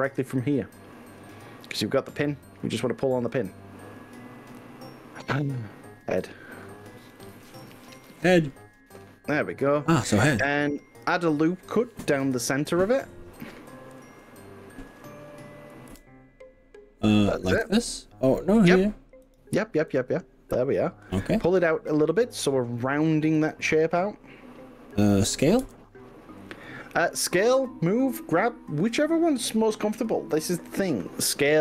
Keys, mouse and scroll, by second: 3.5 click, 7.2-11.3 middle drag, 11.3 click, 15.9 ctrl+r, 20.0 click, 21.5 middle click, 22.2 click, 23.4 g, 25.6 s.